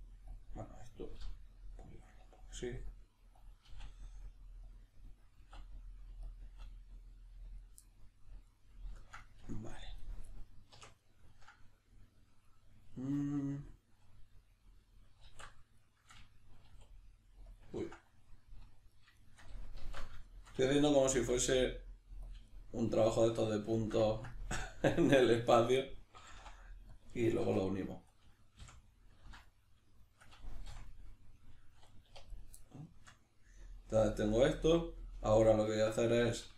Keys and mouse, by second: 0.3 click, 0.6 right click, 1.2 g, 1.8 click, 2.0 right click, 2.2 g, 3.4 click, 3.7 e, 4.8 click, 5.4 e, 6.3 click, 6.5 e, 7.6 click, 7.8-10.0 middle drag, 10.0 right click, 10.3-12.4 middle drag, 12.4 right click, 12.9-17.5 middle drag, 15.3 alt+q, 16.7 e, 17.5 click, 17.7 ctrl+z, 18.2 middle click, 18.9 right click, 19.1 shift+right click, 19.8 alt+q, 20.3-25.0 shift+middle drag, 21.2 e, 22.4 click, 25.0 right click, 25.5 right click, 25.8-27.0 middle drag, 26.2 g, 27.0 click, 27.4 2, 27.9 right click, 28.6 f, 29.4 right click, 30.0 shift+right click, 30.7 f, 31.0-32.3 middle drag, 32.1 1, 32.3 right click, 32.6-36.5 middle drag, 35.8 alt+q.